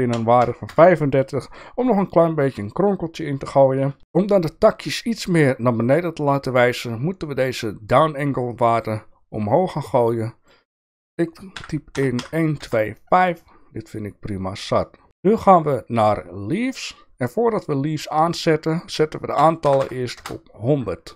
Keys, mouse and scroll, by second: 4.0 shift+middle click, 8.9-10.5 drag, 10.8-13.3 drag, 14.8 shift+middle drag, 15.6 click, 18.1-20.9 drag, 19.8 KP_0.